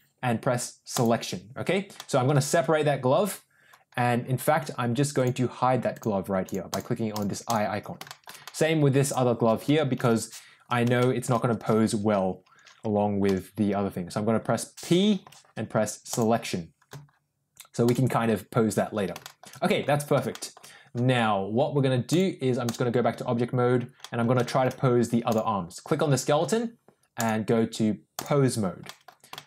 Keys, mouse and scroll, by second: 1.9 middle click, 5.8 click, 6.4 click, 6.7 click, 7.0 click, 7.4 click, 8.0 shift+middle click, 8.4 middle click, 8.9 click, 9.9 l, 10.9 middle click, 13.2 p, 15.1 p, 17.7 click, 19.1 shift+middle click, 19.6 middle click, 20.2 shift+middle click, 22.0 click, 23.9 middle click, 24.3 shift+middle drag, 25.2 click, 27.1-28.2 drag, 28.8 middle click, 29.2 shift+middle click.